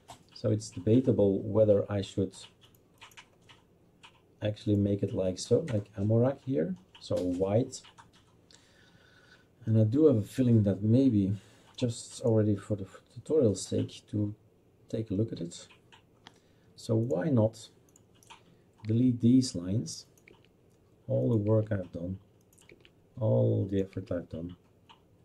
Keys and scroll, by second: 18.9 Delete, 20.3 Delete, 24.0 Delete.